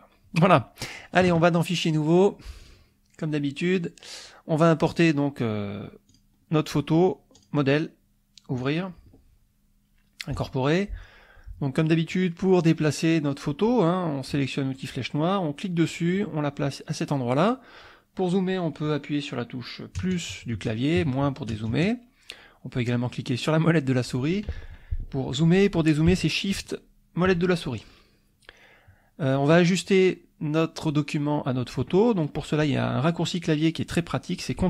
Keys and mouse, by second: 2.1 click, 2.6-3.7 drag, 4.9 click, 6.1 click, 7.4 click, 8.6 click, 10.3 click, 14.7 click, 15.6-17.7 drag, 20.0 KP_Add, 21.0 KP_Subtract, 21.5 KP_Add, 23.3 click, 23.8 click, 26.5 shift+click, 27.8 shift+click.